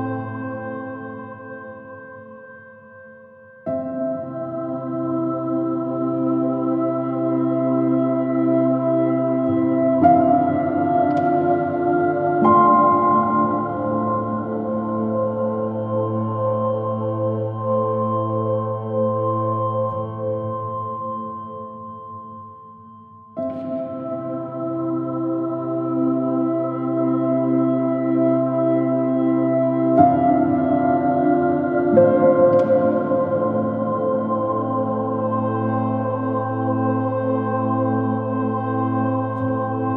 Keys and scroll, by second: 30.9 super+z, 31.4 super+z, 32.2 super+h, 32.4 super+-, 33.8 super++, 34.1 super++, 37.5 super+z, 38.1 super+z, 38.7 super+h, 39.1 space.